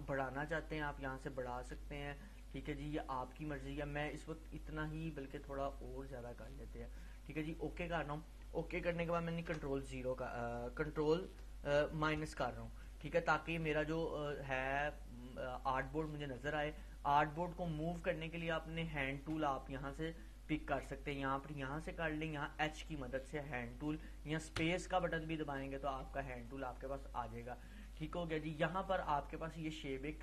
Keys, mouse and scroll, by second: 1.7 click, 5.9 click, 12.3 ctrl+-, 13.6 space, 14.0 click, 14.3-16.5 space, 17.9 click, 18.1-19.5 space, 22.3 space, 22.9 click, 23.0-24.2 space, 25.3 click, 25.4-26.2 space, 26.6-30.2 drag.